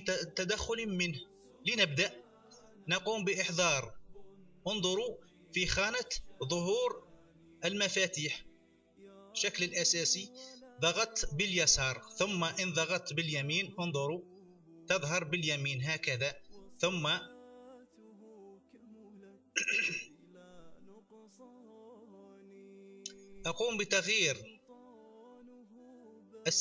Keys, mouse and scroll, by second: 8.8 click, 13.4 right click, 18.8-19.9 drag, 20.5 click, 21.4 click, 25.7-26.6 drag.